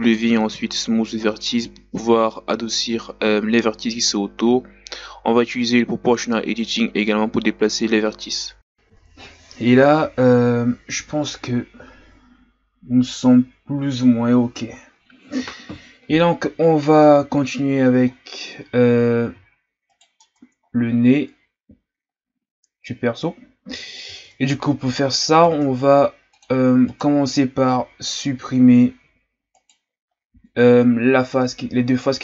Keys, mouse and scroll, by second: 0.0 ctrl+z, 0.4 right click, 1.1 Tab, 1.9 Tab, 2.1 right click, 2.8 Tab, 3.1 ctrl+z, 3.2 ctrl+z, 3.3 ctrl+z, 3.4 ctrl+z, 3.6 Tab, 3.9 scroll down 3, 4.2 scroll up 1, 4.2 Tab, 4.5 right click, 4.7 ctrl+z, 5.3 s, 6.2 s, 6.9 Tab, 7.1-7.5 scroll down 4, 7.5 scroll up 2, 7.7 Tab, 8.0 Tab, 8.3-10.2 scroll down 3, 17.3-18.1 ctrl+scroll up 1, 18.1-18.5 ctrl+scroll down 2, 18.5-19.1 scroll up 2, 19.1-19.9 ctrl+scroll down 3, 19.9 right click, 20.2 Tab, 20.7 scroll up 2, 22.5-24.3 scroll up 2, 24.3 Tab, 24.9 Tab, 25.4 ctrl+Tab, 26.9 right click, 29.5 right click, 30.2-30.7 scroll down 5, 30.7-31.6 scroll up 4.